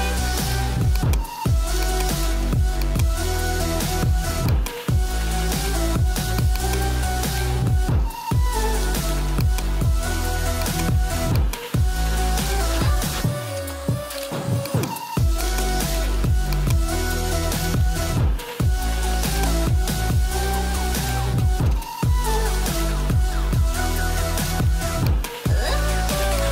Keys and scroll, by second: 5.6 ctrl+g, 7.4-8.5 typing, 15.1 space, 18.0 ].